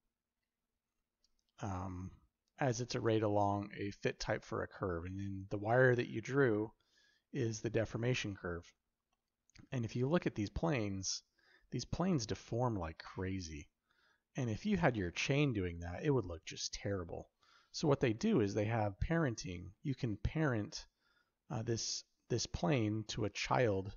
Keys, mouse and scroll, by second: 9.0-9.4 middle drag, 9.7-10.3 shift+middle drag, 10.9-13.2 shift+middle drag, 18.1 middle drag, 18.6-19.1 shift+middle drag, 19.6 middle drag.